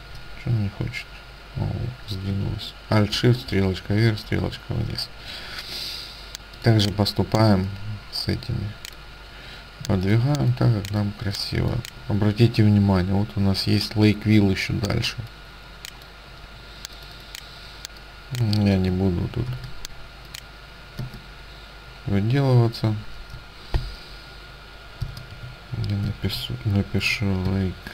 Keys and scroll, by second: 3.1 alt+shift+Up, 3.5 alt+shift+Up, 4.2 alt+shift+Down, 4.2 alt+shift+Up, 19.5 ctrl+c, 21.1 space, 24.9-27.6 typing.